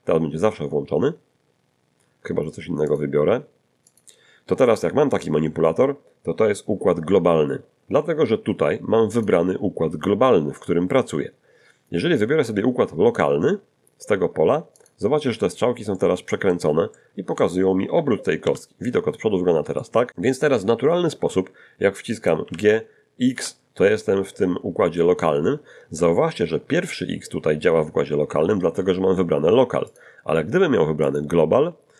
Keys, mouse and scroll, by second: 2.9 click, 3.9 click, 9.1 click, 14.8 click, 15.9 middle click, 16.9 middle click, 17.9 1, 18.4 5, 19.4 scroll up 1, 19.7 shift+middle click, 22.4 g, 28.3 Escape, 29.9 click, 31.1 click.